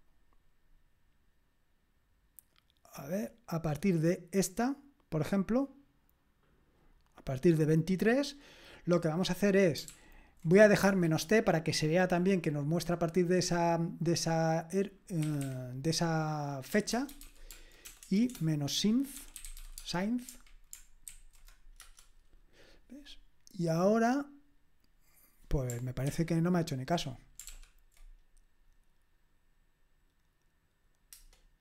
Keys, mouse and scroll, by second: 0.1-9.0 drag, 9.9 ctrl+p, 10.8 space, 16.7-20.1 typing, 21.1 ctrl+alt+v, 21.9 Return, 26.1 ctrl+l, 27.5 ctrl+p.